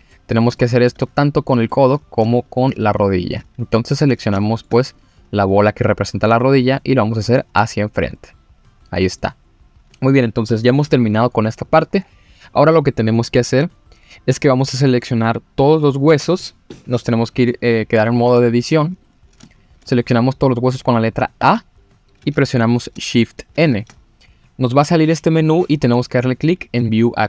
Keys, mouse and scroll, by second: 0.1 middle click, 0.1 scroll down 1, 0.5 shift+middle click, 1.5 middle click, 1.9-2.2 scroll up 3, 2.2 shift+middle click, 3.3 click, 3.9-4.3 scroll up 3, 4.4 shift+middle click, 4.9 click, 5.1 scroll up 2, 6.3 g, 7.5-8.1 scroll down 4, 8.1-9.2 middle drag, 9.8-11.0 scroll down 1, 19.0 click, 19.4 shift+middle click, 20.2 scroll up 2, 21.4 a, 23.5 shift+n.